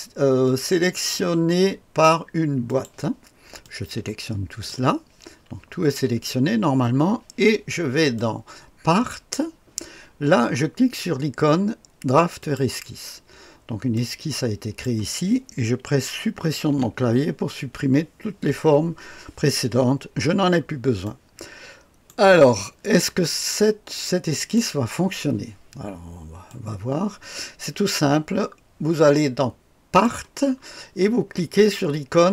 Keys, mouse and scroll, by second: 2.6 click, 3.6-4.7 drag, 8.1 click, 12.4 click, 13.9-14.8 drag, 16.6 Delete, 20.1-21.0 scroll up 1, 21.0-22.1 drag, 24.3 click, 26.4-30.0 drag.